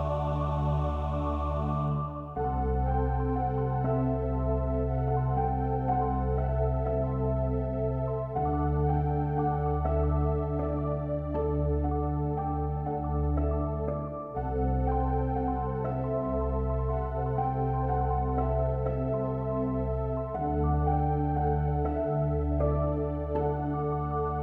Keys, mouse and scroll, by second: 1.0 click, 7.8 ctrl+r, 11.7 ctrl+r, 16.5 middle click, 17.0-19.0 middle drag, 19.0 click, 19.2 middle click, 19.6-20.6 drag, 20.6-21.7 middle drag, 21.7-23.5 drag, 23.5 ctrl+r.